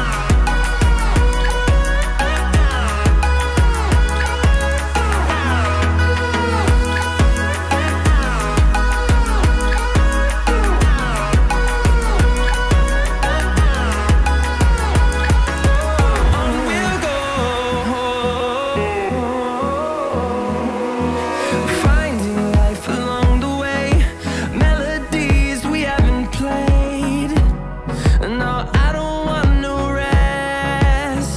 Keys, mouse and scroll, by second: 0.7-1.0 scroll up 1, 9.6 Escape, 9.8 Escape, 14.5 scroll down 3, 14.7 middle click, 16.8 middle click, 16.9 shift+middle click, 22.9 m, 23.0 a, 25.8 shift+middle click, 27.5 scroll down 3, 27.6 Escape, 27.8 Escape, 28.3 shift+middle click.